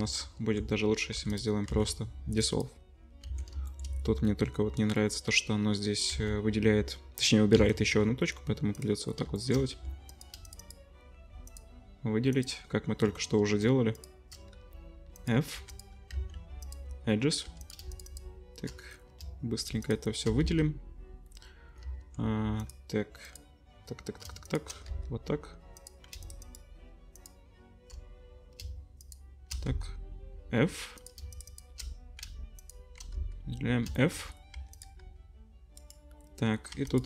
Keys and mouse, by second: 0.2 ctrl+z, 0.5 click, 1.1 2, 1.7 x, 3.3 ctrl+z, 3.7 shift+middle click, 6.1 x, 7.5 x, 9.1-10.1 shift+middle drag, 9.7 2, 10.1 click, 10.2 shift+middle click, 10.6 alt+shift+click, 10.7 alt+shift+middle click, 13.9 shift+click, 14.5 f, 15.1 click, 15.5 2, 16.1 x, 17.4 2, 17.6 click, 17.7 shift+middle click, 17.9 alt+shift+click, 18.0 alt+shift+middle click, 18.0 alt+shift+click, 18.2-19.2 alt+shift+middle drag, 19.8 alt+shift+click, 20.4 f, 21.2-26.2 middle drag, 21.8 ctrl+z, 24.9 f, 26.2 alt+shift+click, 26.3 alt+shift+middle click, 26.4 alt+shift+click, 29.0 alt+shift+click, 29.7 f, 31.3 alt+shift+click, 31.5 alt+shift+click, 31.8 middle click, 32.7-34.0 alt+shift+middle drag, 33.1 f, 34.3 middle click, 34.5 1, 35.0 g, 35.2 click, 35.7 middle click, 36.7 2, 36.9 click.